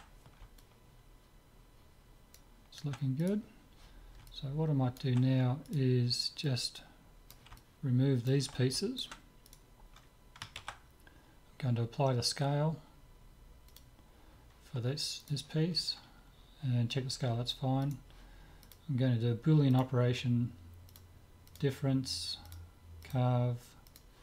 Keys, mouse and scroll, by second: 0.6-2.6 middle drag, 3.2-5.1 right drag, 4.3 click, 4.9 middle click, 5.7 click, 5.7-7.5 right drag, 6.5-8.4 drag, 7.6 right click, 8.2-9.5 middle drag, 9.5-10.5 drag, 9.5 right click, 10.2-11.4 middle drag, 10.8 ctrl+a, 15.3-17.0 middle drag, 17.8-19.7 right drag, 18.7-20.4 drag, 21.0-24.2 drag.